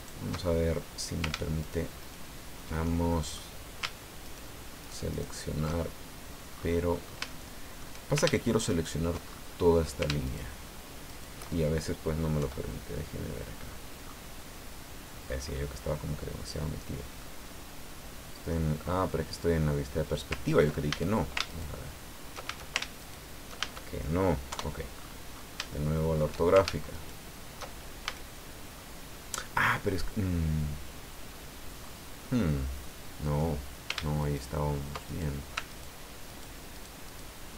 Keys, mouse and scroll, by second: 0.0 ctrl+shift+right click, 0.5-1.0 ctrl+shift+scroll up 1, 1.6 ctrl+shift+right click, 2.0 ctrl+shift+right click, 2.8 ctrl+shift+click, 4.2 ctrl+shift+right click, 4.8 ctrl+shift+right click, 5.9 ctrl+shift+scroll down 1, 6.5-7.1 scroll up 2, 7.3 shift+click, 8.6 ctrl+shift+right click, 9.2-9.7 ctrl+shift+scroll up 1, 10.2 ctrl+shift+right click, 11.0 ctrl+shift+right click, 12.4 KP_5, 13.6-14.9 scroll down 8, 15.2-15.8 scroll up 2, 16.0-16.3 scroll down 1, 16.8 scroll down 1, 17.2-18.7 drag, 18.9 scroll up 1, 19.1 scroll down 1, 19.8-20.1 scroll down 2, 20.9 ctrl+a, 21.5 ctrl+shift+right click, 22.4 ctrl+shift+a, 23.0 ctrl+shift+right click, 23.6 ctrl+shift+a, 24.5 KP_5, 24.9-25.6 scroll up 4, 25.7 shift+click, 26.9 ctrl+shift+right click, 28.0 ctrl+shift+a, 28.8-29.5 scroll down 4, 30.6-30.9 scroll down 2, 31.8 scroll up 2, 32.2-33.5 drag, 34.2 ctrl+shift+right click, 35.0 ctrl+shift+right click, 35.7 ctrl+shift+right click, 36.2 ctrl+shift+right click, 36.7 ctrl+shift+right click.